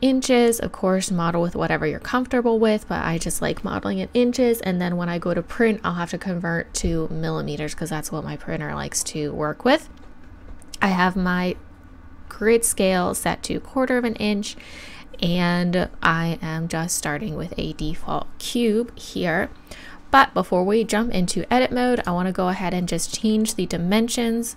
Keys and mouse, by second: 22.0-23.8 drag.